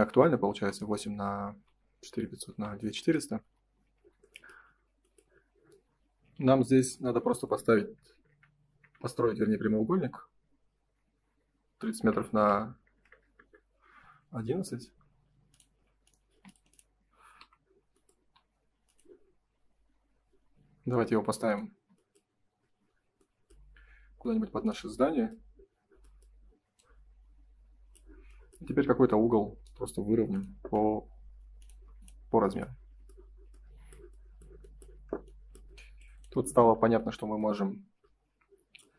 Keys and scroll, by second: 0.5 Delete, 3.8 F3, 8.9 0, 8.9 Return, 11.9 BackSpace, 12.3 1, 13.4 Return, 16.2 shift+space, 21.7 space, 31.8 space, 32.4 F3, 36.3 F3.